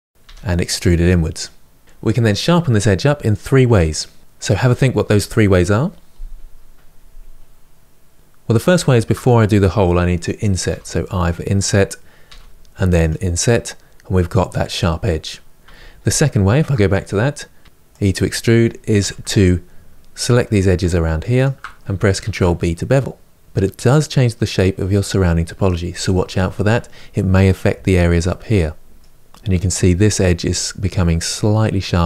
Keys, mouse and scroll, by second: 0.1 e, 1.7 Tab, 8.2 ctrl+z, 12.0 e, 15.6 ctrl+z, 15.8 ctrl+z, 17.4 e, 18.8 2, 20.0 click, 21.2 shift+click, 22.0 ctrl+b, 23.4-32.0 middle drag.